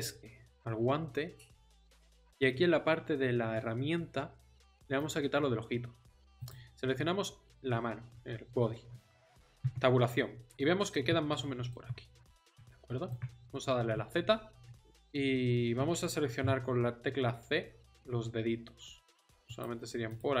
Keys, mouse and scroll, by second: 0.2 Tab, 9.6 Tab, 13.9 z, 15.7 c, 20.2-20.4 drag.